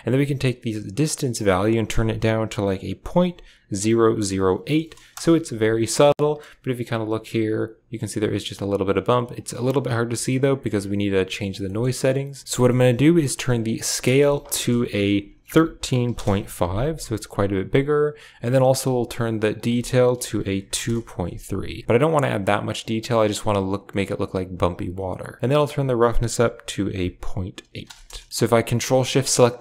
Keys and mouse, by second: 1.0-5.1 drag, 6.2 shift+middle click, 9.4 click, 10.3 click, 12.4 ctrl+z, 12.6 middle click, 13.8-16.0 drag, 19.4-20.7 drag, 25.4-27.7 drag, 28.7 ctrl+shift+click.